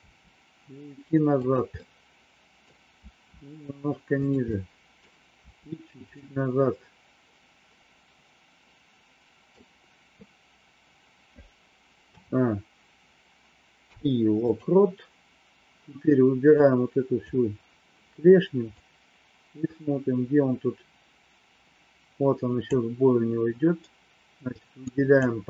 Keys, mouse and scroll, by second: 0.0 r, 1.9 middle click, 3.0 r, 4.5 middle click, 6.7-9.6 middle drag, 11.9 a, 13.7 i, 16.7 click, 18.7-22.7 drag, 24.8 click.